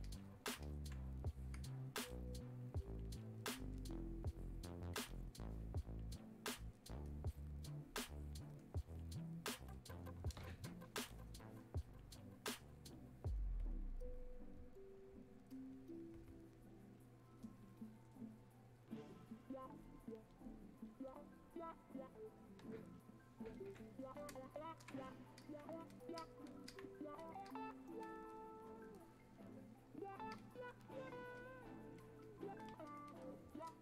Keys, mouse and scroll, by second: 3.7-12.0 drag, 25.4-33.8 alt+drag.